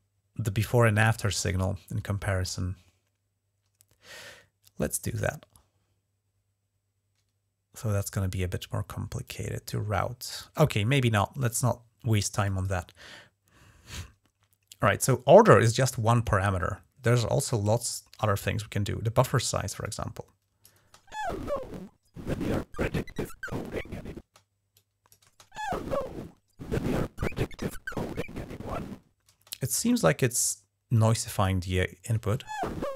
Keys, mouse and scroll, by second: 4.9 right click, 9.1 click, 12.3 click, 19.7-20.5 drag, 20.6 space, 24.1 space, 24.6 click, 25.1 space, 29.2 space, 29.7-30.3 drag, 30.5-31.6 drag, 32.0 space.